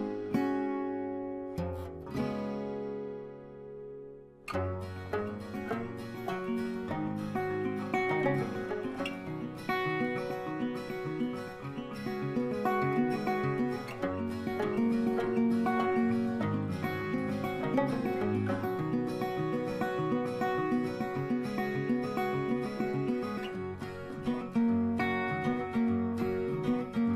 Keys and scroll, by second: 20.9 ctrl+g.